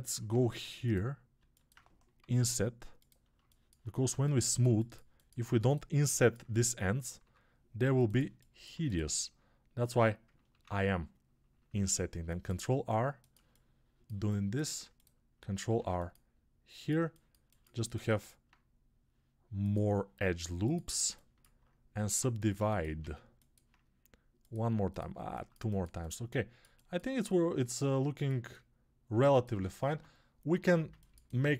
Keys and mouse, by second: 0.1 3, 2.1 i, 11.6 ctrl+r, 15.6 ctrl+r, 21.9 ctrl+Tab, 22.9 alt+z, 29.7 ctrl+Tab.